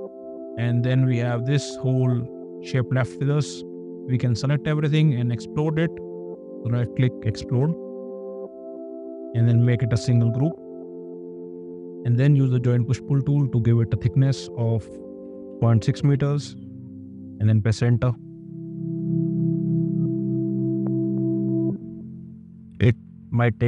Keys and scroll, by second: 9.9 ctrl+g, 12.4 shift+p, 15.5 6, 16.0 Return.